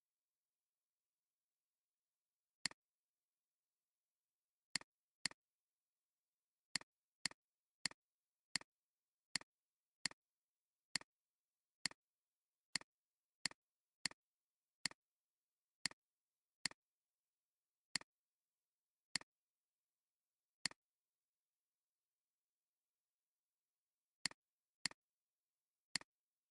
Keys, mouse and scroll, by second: 1.9 alt+scroll up 1, 3.4 scroll up 1, 6.1 alt+scroll up 1, 6.6 space, 7.0 alt+scroll up 1, 7.1 space, 12.3 alt+scroll down 1, 12.6 space, 14.0 alt+scroll down 1, 15.6 space, 23.8 alt+scroll down 1, 24.1 space.